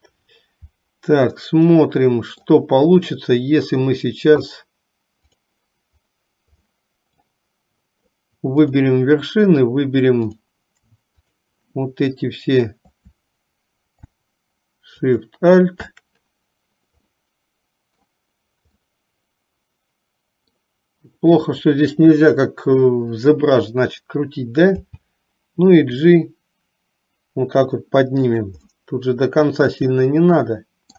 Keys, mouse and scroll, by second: 1.4-2.6 middle drag, 5.6 click, 6.8 middle click, 10.3 click, 11.4 shift+click, 15.2 alt+shift+click, 17.2 middle click, 18.9-20.7 middle drag, 28.7-30.9 middle drag.